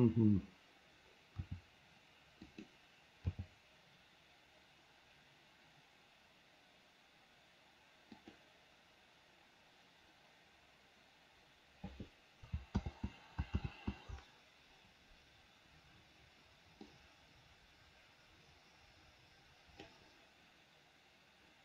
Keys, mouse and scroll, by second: 1.6 r, 3.5 g, 12.9 ctrl+click, 13.8 ctrl+z, 17.1-20.2 drag.